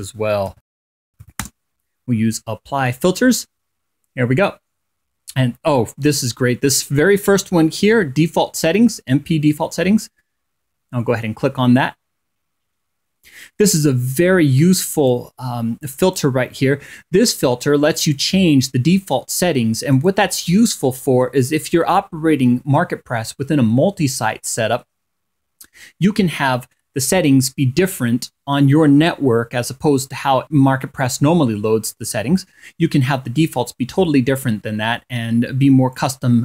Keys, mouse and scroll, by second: 0.0-1.3 typing, 7.5 click, 11.9-12.3 scroll down 2, 12.7 scroll down 2, 14.6 click, 15.5 click, 17.5 click, 18.0-19.6 scroll up 2, 19.6 click.